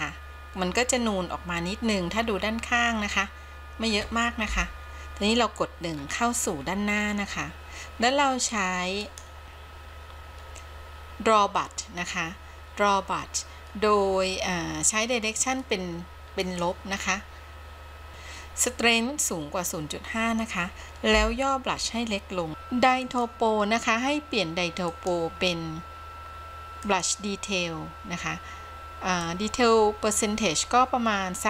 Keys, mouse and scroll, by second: 4.7 KP_1, 6.1-9.1 scroll up 3, 9.1-10.2 drag, 16.5 click, 21.5 f, 22.5 f, 23.2-31.4 drag.